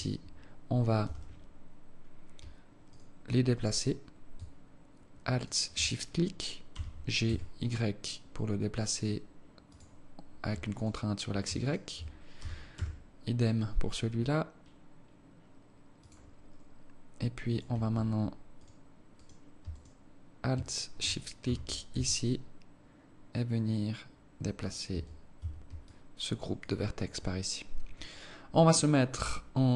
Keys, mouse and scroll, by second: 1.0 z, 2.9 alt+right click, 3.6 alt+right click, 5.3 alt+shift+right click, 6.7 g, 10.8 alt+right click, 11.6 alt+shift+right click, 12.4 g, 17.5 right click, 18.6 right click, 19.1 right click, 19.7 alt+right click, 20.6 alt+shift+right click, 21.4 g, 24.9 Tab, 25.4 Tab, 25.8 alt+click, 26.6 alt+click.